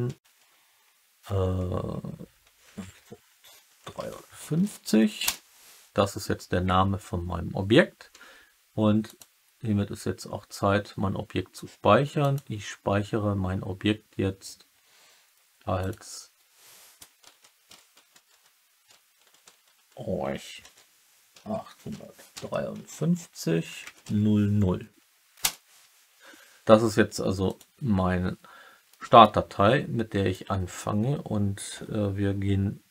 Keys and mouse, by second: 9.0-12.4 drag, 28.8 middle drag.